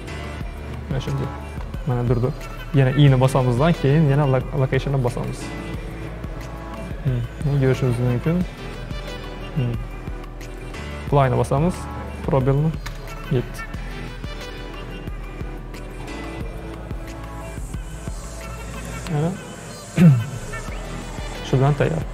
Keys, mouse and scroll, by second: 6.9-9.9 drag, 11.2-12.9 drag, 12.9 space, 20.5 space.